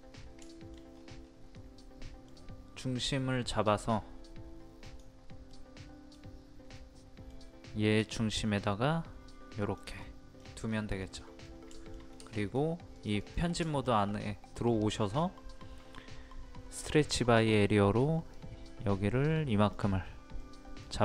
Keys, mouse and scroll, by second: 0.5 shift+middle click, 0.9-1.6 scroll up 1, 1.6 middle click, 4.8 click, 5.5 middle click, 9.6 click, 10.0 middle click, 10.3-11.0 scroll down 2, 11.0 middle click, 11.4-11.7 scroll down 1, 11.7 shift+middle click, 12.9 click, 13.7 shift+middle click, 16.7-20.3 drag.